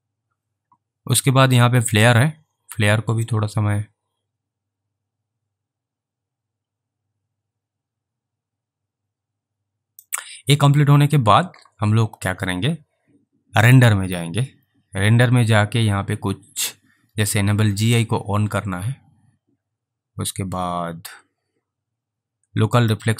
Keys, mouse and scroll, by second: 1.9 Return, 2.0 click, 3.7 click, 10.0 scroll up 3, 13.6 scroll, 13.7 click, 17.8 click, 22.9 click.